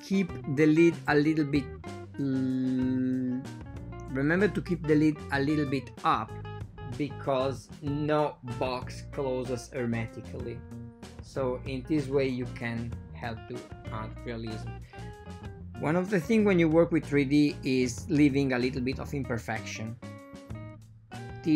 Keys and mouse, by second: 0.2 alt+shift+click, 1.5 r, 4.4 ctrl+middle click, 5.6 ctrl+middle click, 5.9 Tab, 7.0 ctrl+middle click, 7.1-7.8 typing, 7.7 shift+middle click, 9.6 ctrl+middle click, 10.1 ctrl+middle click, 11.8 ctrl+middle click, 12.5 ctrl+shift+middle click, 13.1 shift+middle click, 13.2 shift+a, 15.2 s.